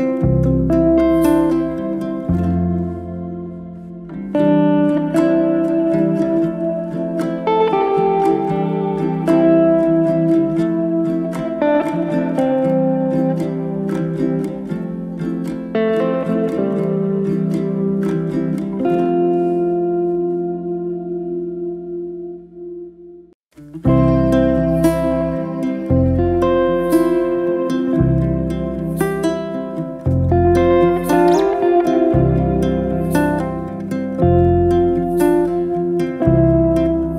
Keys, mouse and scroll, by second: 0.6 Tab, 1.0 click, 1.3 3, 1.6 click, 2.4-3.9 middle drag, 4.8-6.3 middle drag, 8.2 shift+click, 8.7 middle click, 9.3 shift+d, 9.9 p, 10.7 Tab, 10.8 click, 11.2 Tab, 11.4-11.8 middle drag, 11.8-12.4 scroll up 2, 12.4 click, 14.0-15.2 middle drag, 15.2 e, 16.2 ctrl+z, 16.4 middle click, 17.1 1, 17.4 click, 18.5-19.9 g, 20.1 middle click, 20.6 ctrl+z, 20.9 middle click, 21.5 g, 23.0 g, 23.1 middle click, 23.5 ctrl+z, 23.7 scroll up 2, 24.0-24.4 scroll down 1, 24.4-26.6 middle drag, 26.6 shift+r, 28.5 click, 29.2 shift+r, 31.5 click, 32.3 click, 32.9 ctrl+r, 33.4 click, 36.1 click, 36.8 g.